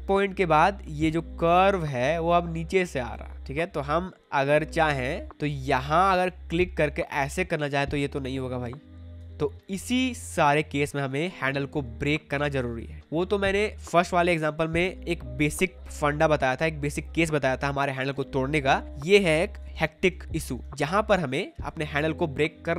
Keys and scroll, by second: 3.3 ctrl+z, 9.3 ctrl+z, 11.2 space, 13.0 space, 19.7 space.